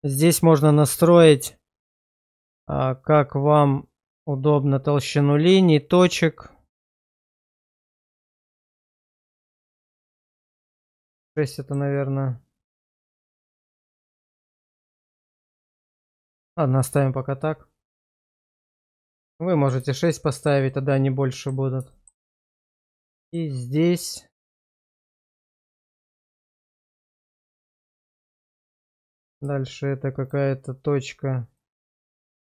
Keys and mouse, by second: 11.3 middle click, 17.9 middle click, 18.7 shift+middle click, 19.1 middle click, 19.9 shift+middle click, 20.3 shift+middle click, 20.7 middle click, 21.9 shift+middle click, 22.4 middle click, 23.2 shift+middle click, 24.3 click, 25.1 1, 26.2 click, 26.7 1, 27.2 middle click, 28.4 middle click, 29.4 click, 31.5 right click.